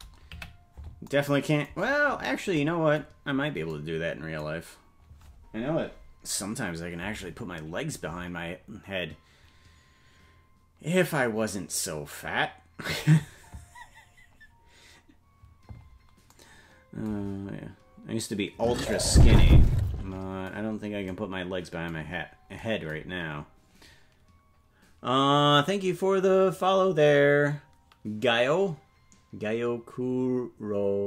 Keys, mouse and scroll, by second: 0.3 KP_Decimal, 1.8-2.4 scroll down 10, 3.3-3.7 scroll up 3, 20.7-21.1 scroll up 2, 22.1-22.6 scroll down 3.